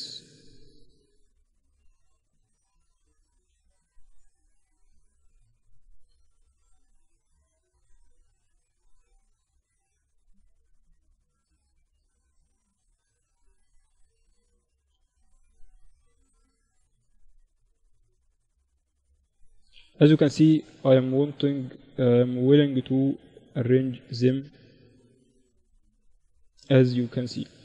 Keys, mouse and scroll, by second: 0.0 ctrl+z, 0.7 a, 1.0-4.5 right drag, 1.7 a, 3.2-5.2 drag, 5.0 a, 5.4-9.6 right drag, 6.4-7.4 drag, 7.4 a, 7.7 click, 9.6-10.7 middle drag, 10.8 middle click, 13.7 a, 14.2-16.2 right drag, 15.4-17.2 drag, 17.3-19.1 right drag, 18.0-20.0 drag, 20.0-23.1 middle drag, 23.1 Tab, 24.1 KP_7.